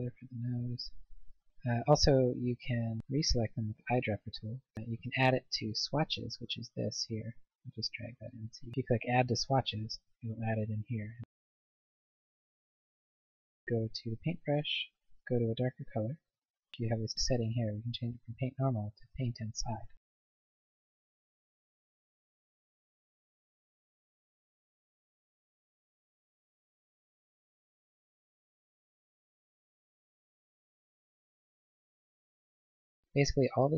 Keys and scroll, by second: 19.9 ctrl+z.